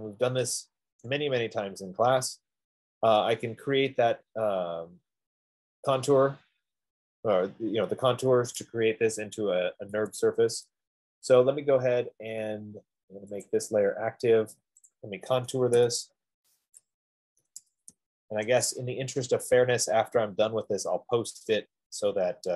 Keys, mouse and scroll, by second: 0.4 click, 1.5 right click, 2.1 middle click, 3.9 scroll, 10.5 Escape, 13.9 click, 15.4 click, 16.1-18.2 typing, 18.6 Return.